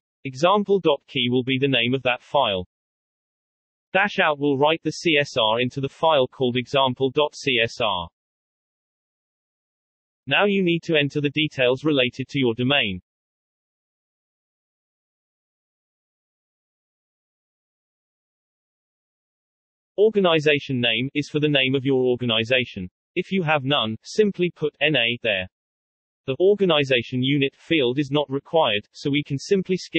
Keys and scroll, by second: 0.0-8.5 typing, 13.0-19.1 typing, 14.1 Return, 19.4 Return, 21.6-22.4 typing, 23.0 Return.